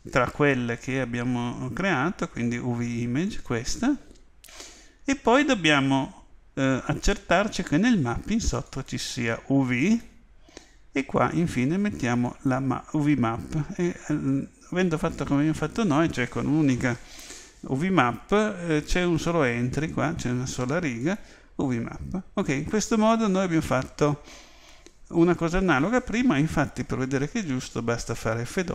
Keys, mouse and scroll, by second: 5.0-7.5 middle drag, 8.7 click.